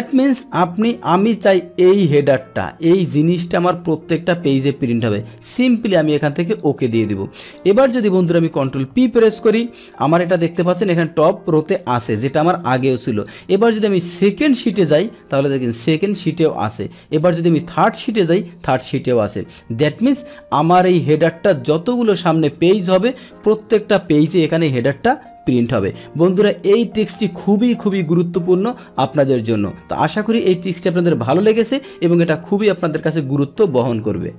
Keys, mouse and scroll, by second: 1.9 click, 6.6 click, 7.4 click, 8.4 click, 9.0 ctrl+p, 14.6 click, 17.2 click, 20.6 Escape, 21.5-22.5 drag, 23.8 ctrl+p, 25.7 Escape, 31.2 click, 32.1 click.